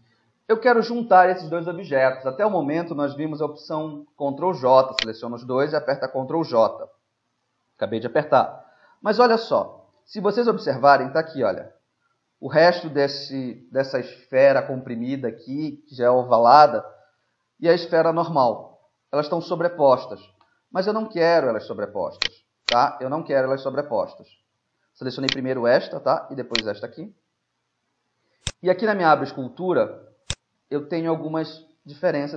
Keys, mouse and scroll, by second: 0.3 middle click, 5.1 right click, 6.3 ctrl+j, 8.8 z, 9.2 middle click, 9.8 middle click, 10.5-12.3 middle drag, 15.7-19.3 drag, 15.7-19.3 right drag, 20.0-21.0 middle drag, 20.5 ctrl+z, 21.2 z, 21.6 middle click, 21.8 middle click, 22.3 right click, 22.7 click, 25.4-28.4 right drag, 28.5-32.3 drag.